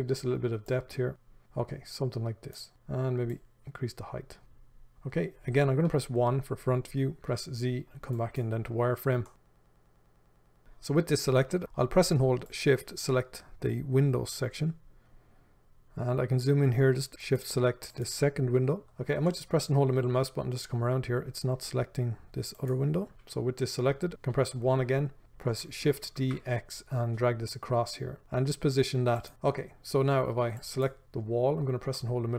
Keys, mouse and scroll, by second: 0.9-9.3 drag, 6.1 KP_1, 7.5 z, 9.3-10.6 shift+middle drag, 10.6 click, 15.0-17.6 ctrl+middle drag, 17.6 shift+click, 18.8-19.5 scroll down 1, 19.5-22.9 middle drag, 20.1 scroll down 1, 21.0-21.8 scroll up 1, 21.8-22.3 scroll down 1, 22.9 shift+click, 23.5-24.6 scroll down 1, 24.6 KP_1, 26.1 shift+d, 29.3 click, 32.2-32.3 middle drag.